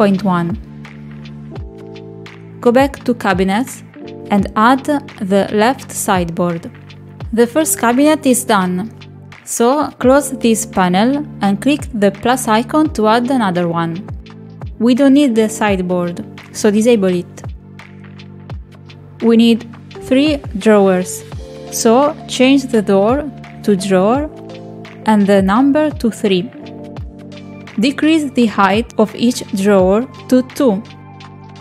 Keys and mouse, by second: 0.7 click, 2.0 click, 4.0 click, 7.6 click, 10.0 click, 12.8 click, 14.5 shift+middle click, 15.3 shift+middle click, 15.9 click, 19.2 click, 21.4-23.4 drag, 26.4 click, 29.7 click, 30.3 click, 30.6 click, 31.4 click.